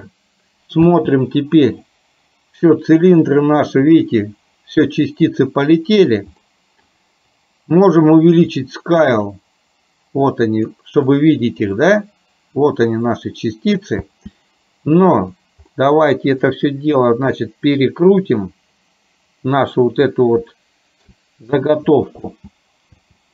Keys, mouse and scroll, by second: 1.0 space, 3.3-5.3 middle drag, 6.5 middle click, 8.7-10.7 drag, 11.2-13.8 middle drag, 14.1 space, 15.8 middle click, 17.7-20.3 drag, 20.5 shift+middle click, 22.5 space, 22.9 space.